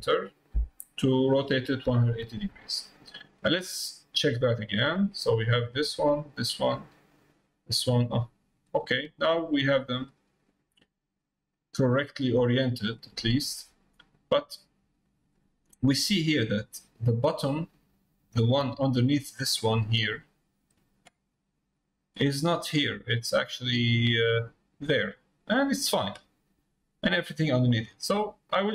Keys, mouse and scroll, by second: 4.6 middle click, 8.0 click, 9.9 click, 10.5 click, 15.0 click, 18.3 click, 20.6 middle click, 23.8 scroll down 1, 24.8 scroll down 1, 24.9 middle click, 28.1 middle click.